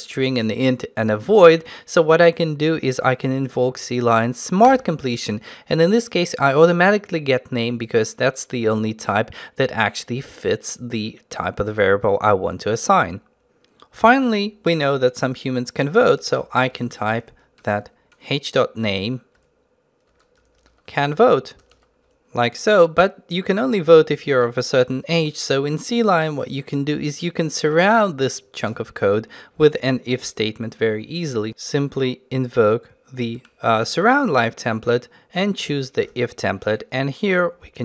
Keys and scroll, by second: 4.7 ctrl+shift+space, 19.4 Tab, 33.8 ctrl+alt+t.